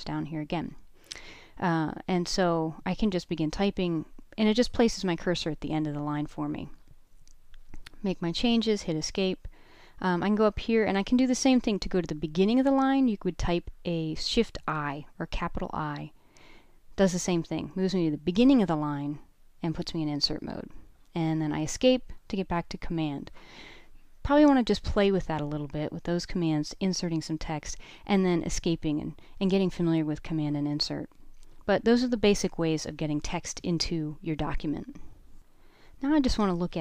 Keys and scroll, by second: 1.5-2.6 typing, 4.4 Escape, 7.0 k, 7.1 k, 7.2 k, 7.8 k, 11.3 shift+i, 15.0 shift+8, 16.8 ⟲, 30.8-34.2 typing.